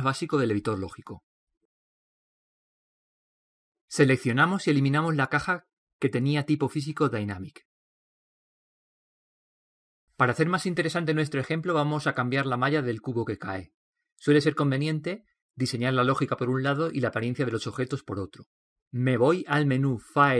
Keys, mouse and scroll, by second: 5.3 right click, 5.7 x, 6.4 x.